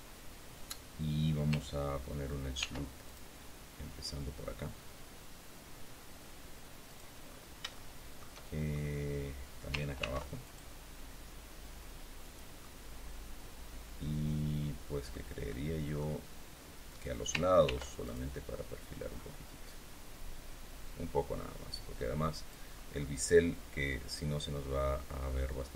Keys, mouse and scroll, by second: 0.0 scroll down 2, 2.5 ctrl+r, 3.0 ctrl+click, 6.8 click, 7.2-7.5 scroll down 2, 7.7 shift+middle click, 8.6 shift+scroll up 3, 9.9 ctrl+r, 10.3 ctrl+click, 12.1 click, 12.5-15.2 middle drag, 15.4 middle click, 17.6 ctrl+r, 17.9 ctrl+click, 22.2 click, 22.9-25.7 middle drag.